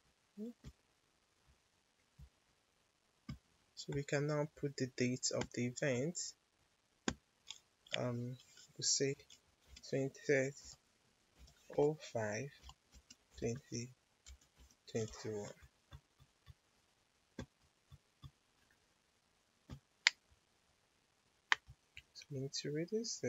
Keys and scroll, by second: 9.1 2, 9.5 0, 10.6-14.8 typing.